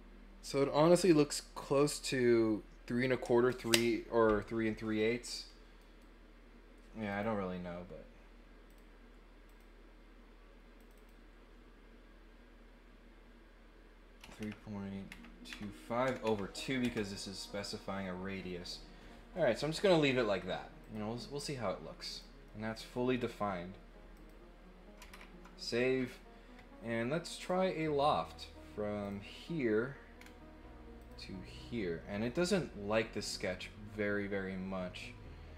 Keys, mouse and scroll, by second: 5.8 right click, 7.1 click, 8.7 click, 9.4 click, 10.7 click, 10.9 click, 20.8 click, 22.1 click, 22.4 middle click, 24.1 click, 27.3 click, 29.0 click, 30.1 scroll down 1, 30.9 click.